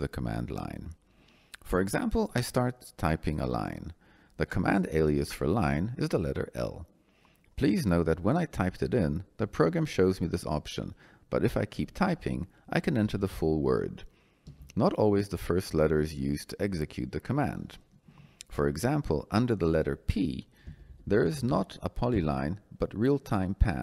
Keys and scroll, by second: 13.0 i, 14.4 n, 20.6 BackSpace, 22.0 p.